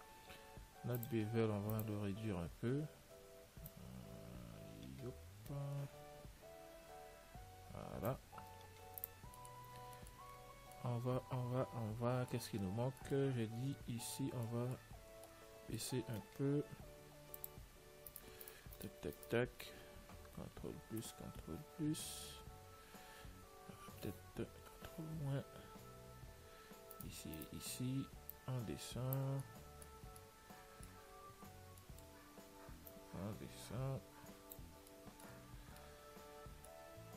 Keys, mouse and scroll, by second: 1.3-3.8 drag, 4.0 click, 9.2 ctrl+s, 9.7-12.9 middle drag, 13.9 Tab, 17.7 click, 18.4-21.4 right drag, 20.6 ctrl+KP_Add, 22.9-24.9 middle drag, 24.9 ctrl+n, 27.2-29.4 right drag, 28.6 click, 29.7-33.2 middle drag, 33.2 click, 35.2-37.1 middle drag.